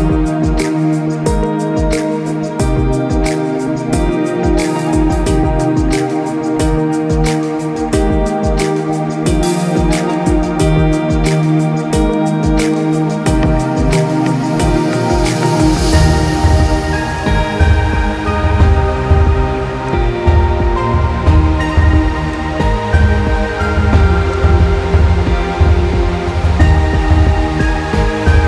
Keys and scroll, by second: 2.7 ctrl+-, 3.2 ctrl+-, 4.0 ctrl+-, 4.5 ctrl+=, 4.6 ctrl+=, 4.8 ctrl+=, 5.9 ctrl+=, 6.2 ctrl+=, 10.8 ctrl+-, 11.6 ctrl+-, 18.0 ctrl+j, 20.3 ctrl+-, 20.6 ctrl+-, 27.1 ctrl+=, 27.5 ctrl+=.